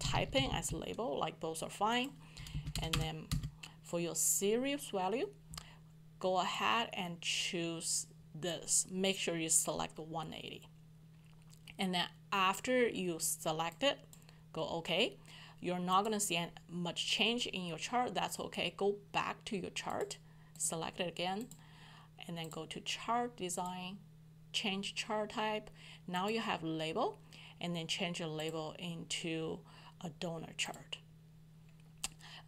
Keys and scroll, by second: 0.0-0.9 typing.